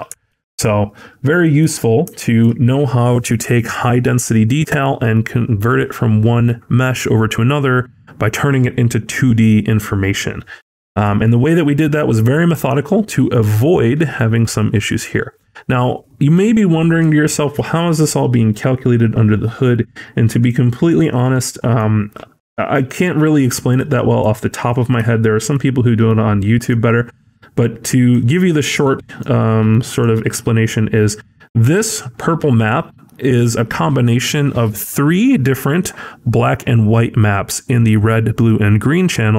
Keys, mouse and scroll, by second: 0.2 ctrl+z, 0.7-1.4 scroll down 6, 1.2 middle click, 1.7-2.1 scroll down 2, 2.1 shift+middle click, 11.3-12.4 scroll up 5, 11.8 middle click, 13.2 middle click, 13.2-14.0 scroll up 6, 14.0 middle click, 15.0-15.7 scroll down 1, 16.2 click, 16.2 scroll down 4, 16.5 scroll.